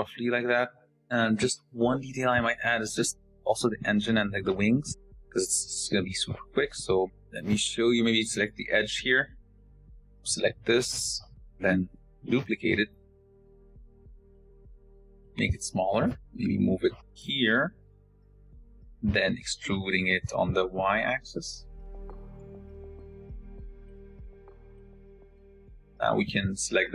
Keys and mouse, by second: 0.5 shift+click, 2.6 shift+click, 9.0 click, 12.0 shift+d, 14.3 click, 15.1 s, 15.8 g, 17.7 click, 18.6 shift+click, 20.1 e, 22.8-26.1 drag.